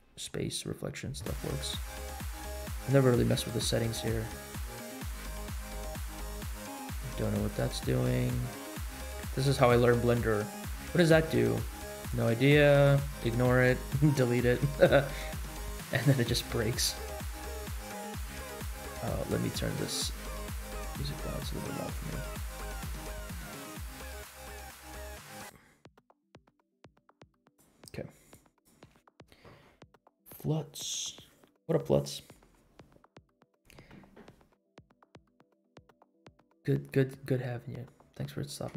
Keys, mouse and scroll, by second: 4.0-7.8 drag, 9.1 ctrl+z, 10.2-12.8 drag, 13.1 ctrl+z, 37.8 scroll up 2.